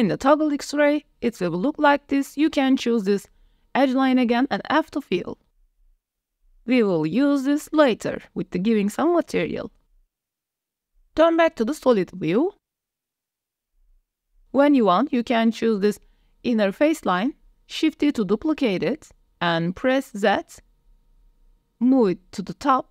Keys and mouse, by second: 0.5 Tab, 1.3 middle click, 1.6 2, 2.4 alt+click, 3.1 middle click, 4.1 f, 4.5 click, 5.2 click, 5.8 a, 6.3 s, 6.4 click, 6.7 alt+click, 6.9 click, 7.7 f, 7.9 click, 8.2 Tab, 9.2-9.8 drag, 11.1 click, 11.6 shift+drag, 11.8-12.5 middle drag, 13.0 Tab, 13.0 s, 13.0 Tab, 13.4 click, 13.8 3, 14.4 alt+click, 15.7 click, 16.2 middle click, 17.2 shift+click, 18.2 shift+d, 19.5 z, 21.6 click.